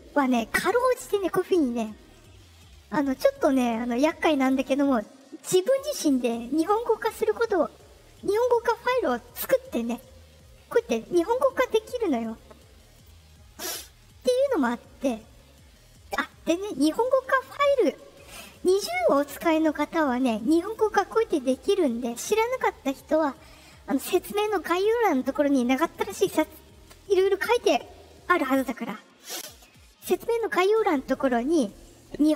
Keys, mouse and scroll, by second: 0.1 click, 1.1 click, 12.9 click, 13.6 click.